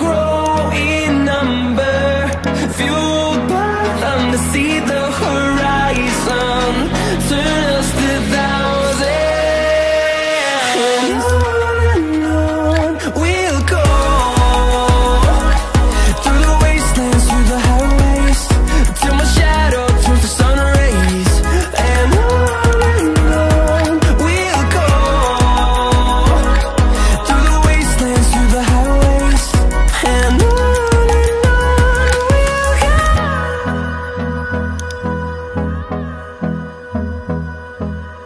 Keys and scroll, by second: 2.0 Return, 20.5 ctrl+z.